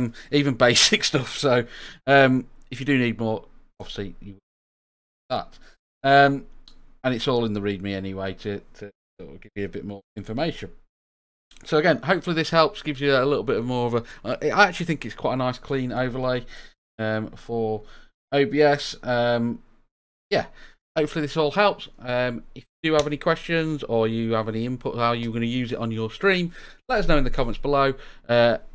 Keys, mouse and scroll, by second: 17.2 click, 18.6-20.2 drag.